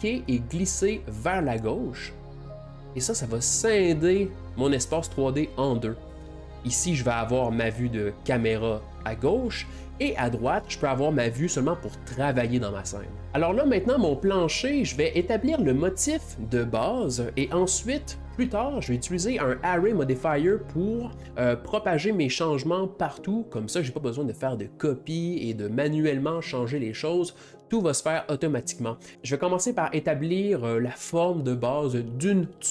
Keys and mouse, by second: 1.5-4.7 drag, 6.9-13.3 ctrl+middle drag, 13.3 click, 20.0 g, 26.6 click.